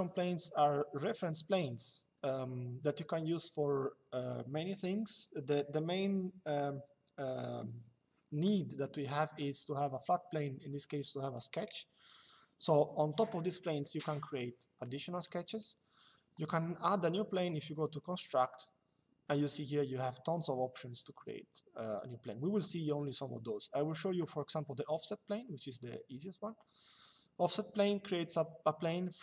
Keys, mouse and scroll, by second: 17.1 click.